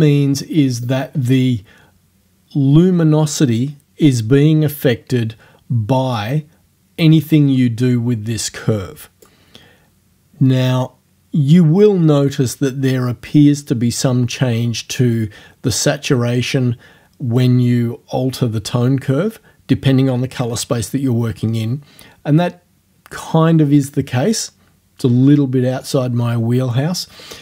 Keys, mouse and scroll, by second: 0.9 click, 6.2-7.4 drag, 7.7-9.5 drag.